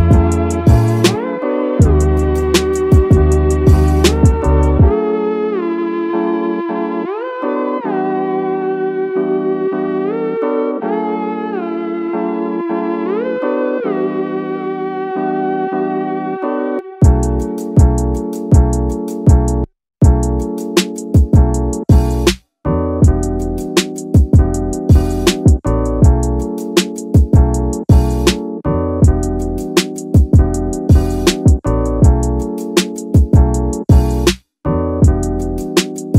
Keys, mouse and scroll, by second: 1.7 KP_3, 3.0-5.3 drag, 15.7-17.2 drag, 18.6 click, 19.4-20.5 drag, 21.0-24.1 drag, 22.1 KP_0, 24.8 scroll up 1, 25.5-25.8 shift+middle drag, 25.5-25.8 scroll up 1, 27.8-32.3 drag, 33.4 click, 35.0 scroll down 1, 35.8-36.1 scroll down 1, 35.8 KP_1.